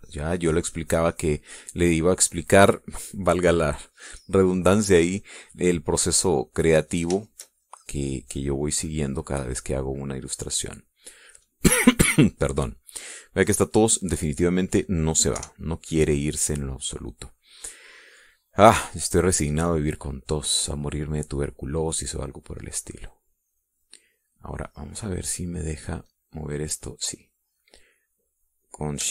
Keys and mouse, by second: 1.1-2.5 drag, 2.9 click, 6.3 click, 7.1-8.6 drag, 9.0-10.8 drag, 11.0-12.6 drag, 14.6 click, 15.4 click, 16.5 KP_5, 17.1 click, 18.0 middle click, 21.2-24.9 drag, 27.2 click, 28.0-29.1 middle drag.